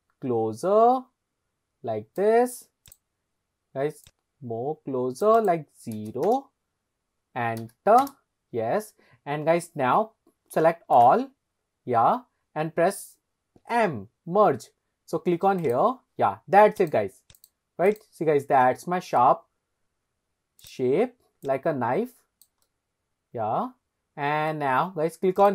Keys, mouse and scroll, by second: 2.9 click, 4.1-5.5 drag, 6.0 KP_0, 6.3 KP_Enter, 11.0 a, 13.6 m, 16.8 click, 17.4-18.0 drag, 18.3-18.6 scroll down 2, 18.6-19.2 middle drag, 20.6 click, 21.4 click, 22.6-24.6 middle drag, 25.4 click.